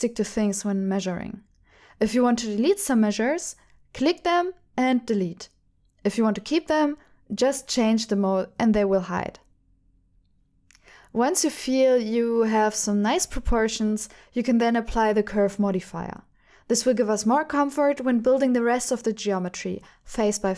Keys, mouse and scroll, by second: 3.9 click, 4.9 Delete, 8.2 click, 9.8 alt+z, 9.8 ctrl+alt+shift+f, 10.6 shift+click, 18.1-19.8 drag.